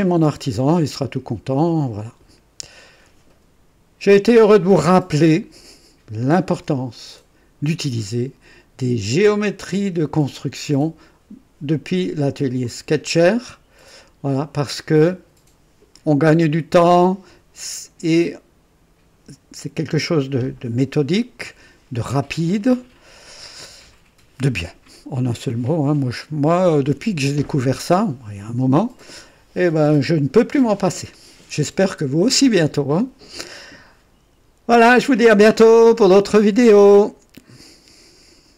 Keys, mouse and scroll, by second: 6.2 ctrl+click, 13.9 click, 37.5 right click.